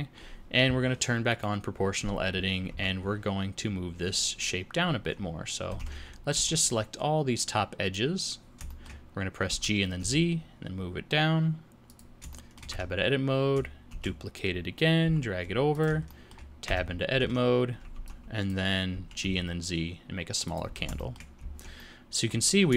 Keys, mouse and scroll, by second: 1.3 click, 2.7 Tab, 5.8 alt+a, 6.3 b, 8.7 shift+middle click, 9.5 g, 12.3 shift+middle click, 12.7 Tab, 14.0 shift+d, 16.1 shift+middle click, 16.7 Tab, 17.2 alt+a, 17.9 b, 18.9 g, 20.7 Tab, 21.1 shift+middle click, 21.4 z, 21.8 middle click, 22.5 scroll down 3.